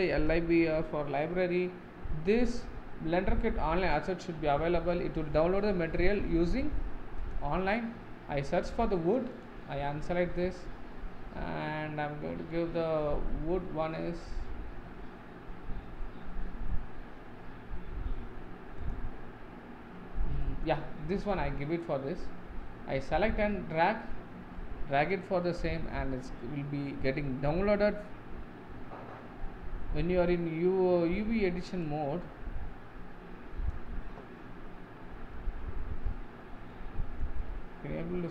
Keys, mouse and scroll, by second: 9.4-16.3 drag, 31.8-34.8 drag, 35.4-36.7 scroll down 9, 36.7 middle click, 37.5-38.3 scroll up 14.